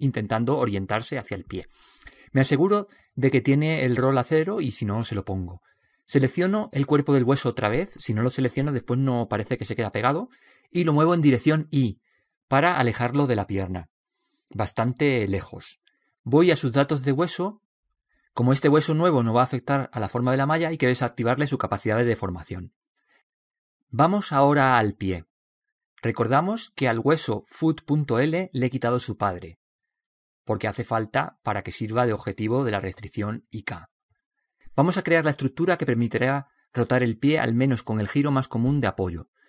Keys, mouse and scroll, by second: 7.0-8.4 right drag, 8.1 click, 9.8 middle click, 10.7 click, 12.5-16.8 middle drag, 12.6 scroll up 1, 20.1-22.2 middle drag, 23.4 click, 25.6-29.3 middle drag, 25.6-26.6 scroll up 1, 29.3 right click.